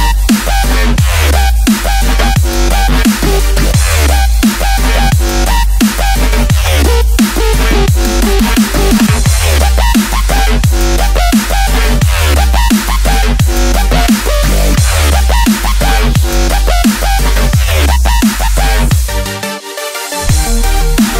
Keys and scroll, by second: 13.6 Tab, 14.3-17.9 typing, 20.4 space, 21.0 alt+super+space, 21.1 alt+super+space.